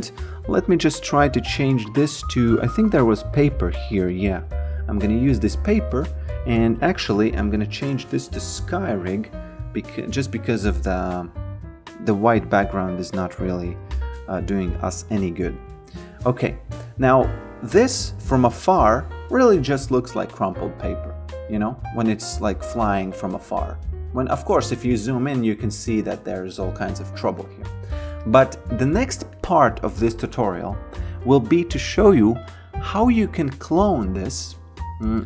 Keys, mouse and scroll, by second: 0.0 click, 6.1 click, 6.3-7.9 typing, 8.8 click, 9.1 Delete, 10.4 click, 13.9 alt+click, 14.9 alt+right click, 15.2 alt+click, 17.4 alt+click, 18.4 alt+right click, 20.5 click, 21.9 alt+right click, 24.7 alt+right click, 27.4 alt+right click, 28.2 alt+click, 28.9 alt+middle click, 29.4 alt+right click, 33.5 click.